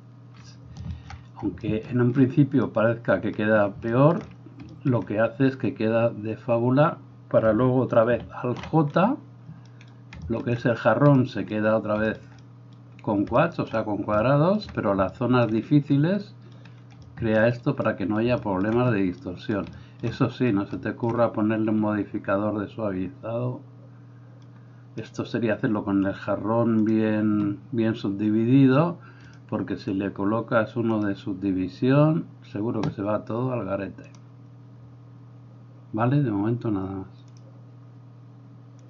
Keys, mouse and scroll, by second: 1.1-27.0 drag, 8.4 alt+j, 27.0-29.4 middle drag, 29.4-38.8 drag.